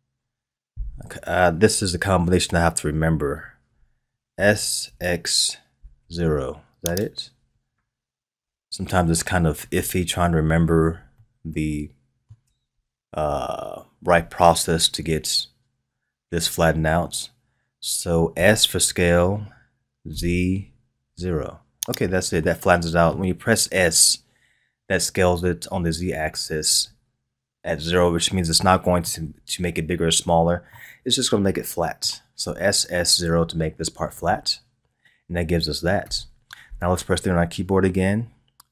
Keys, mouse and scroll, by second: 4.3 s, 8.3 KP_1, 11.1-14.2 shift+middle drag, 18.3 s, 22.4-25.4 middle drag, 29.0-34.3 middle drag, 36.0 KP_3, 37.5-38.7 scroll down 1.